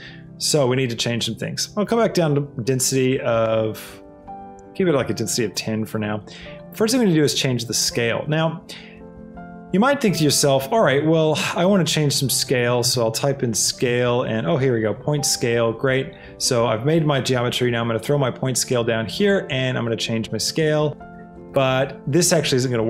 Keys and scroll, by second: 1.8 KP_1, 2.2 Return, 5.5 Return, 9.9 a, 12.8 c, 13.2 a, 13.5 l, 13.9 e.